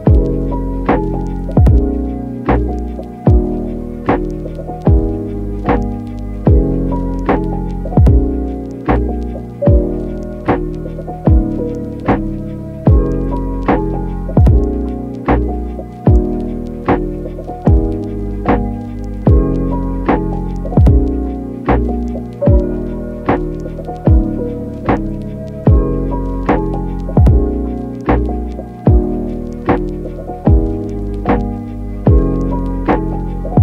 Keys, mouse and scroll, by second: 0.2 middle click, 1.1 g, 1.4 g, 2.7 click, 4.4 click, 6.3 click, 7.5 middle click, 9.3-11.5 drag, 12.9 middle click, 13.1 Tab, 14.1-14.4 ctrl+r, 14.6 ctrl+z, 14.8 ctrl+r, 14.9 ctrl+r, 15.1 ctrl+r, 18.0 g, 18.1 z, 18.6 click, 20.1 click, 20.6 ctrl+r, 21.7 ctrl+r, 21.7 ctrl+click, 21.9 ctrl+r, 22.1 ctrl+r, 22.1 ctrl+click, 22.2 ctrl+r, 22.3 click, 22.8 click, 26.7 e, 27.6-28.9 drag, 29.0 ctrl+click, 31.5 e, 31.7 click, 32.8 e, 33.1 click, 33.3 s, 33.3 z.